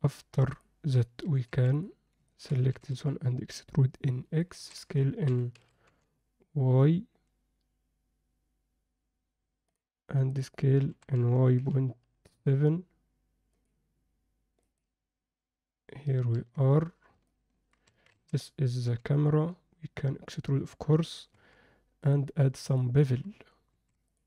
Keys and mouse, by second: 0.5 click, 1.5 2, 2.3 ctrl+middle click, 2.7 e, 5.5 s, 10.3 click, 10.9 s, 14.6 click, 16.3 Tab, 17.3-17.7 middle drag, 17.9 Tab, 18.1 a, 18.9 e, 21.3 Tab, 22.2-22.7 drag, 23.7 ctrl+a.